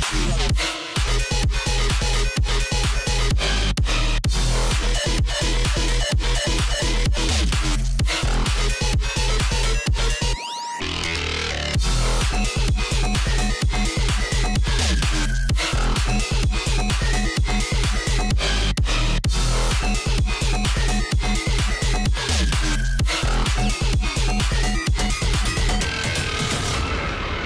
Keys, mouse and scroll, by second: 0.7 alt+scroll up 1, 1.1 click, 3.1 a, 3.3-5.0 drag, 5.0-6.4 drag, 6.5-7.1 scroll down 2, 7.5 alt+scroll up 1, 7.6 click, 7.8 space, 8.3 alt+scroll up 1, 8.6 click, 12.3-17.2 drag, 17.2 shift+Left, 18.4 Right, 19.0 Left, 19.2-21.3 drag, 21.3 shift+m, 22.5 alt+click, 27.3 alt+scroll up 1.